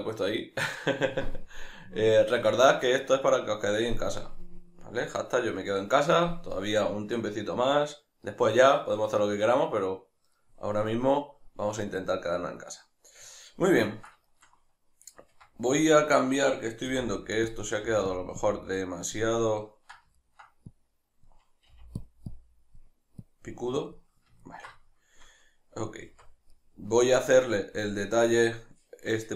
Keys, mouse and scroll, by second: 15.2 Tab, 17.6 click, 17.8 f, 18.2 click, 20.2 ctrl+middle click, 20.7-22.1 drag, 21.7 f, 24.4-29.3 ctrl+middle drag, 26.0 Tab.